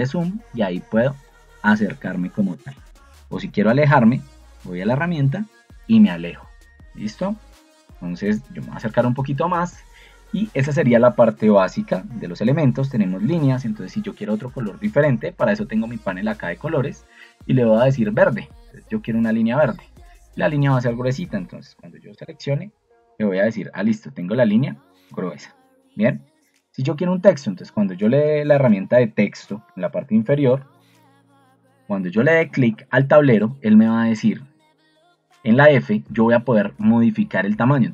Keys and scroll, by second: 10.5 Escape, 15.2 ctrl+2, 18.6 Escape, 29.7 ctrl+2, 31.8 Escape.